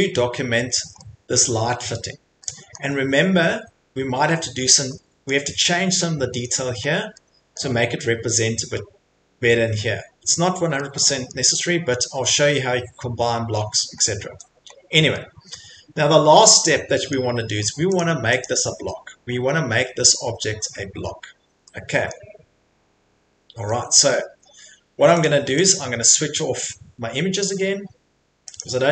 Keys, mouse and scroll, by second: 0.8 Escape, 1.4 middle click, 2.0-2.5 scroll, 2.7 middle click, 3.0 middle click, 3.1 middle click, 3.5 middle click, 3.6 middle click, 3.8 middle click, 4.3 middle click, 5.3 middle click, 6.6 middle click, 6.6 middle click, 6.9 middle click, 7.5 middle click, 7.7 middle click, 9.1 middle click, 9.2 middle click, 11.4 middle click, 13.9 middle click, 14.0 middle click, 14.1 middle click, 14.1 middle click, 14.3 Escape, 14.7 middle click, 14.8 scroll, 14.9 middle click, 15.5 middle click, 16.4 middle click, 16.5 middle click, 17.1 middle click, 17.1 middle click, 17.7 Escape, 18.0 click, 18.5 click, 18.8 Escape, 19.3 middle click, 19.4 middle click, 21.0 middle click, 21.1 middle click, 21.1 middle click, 22.1 middle click, 22.8-24.0 scroll, 24.2 scroll, 24.5 Escape, 25.2 middle click, 25.2 click, 25.7 click, 26.8 Escape, 28.6 click.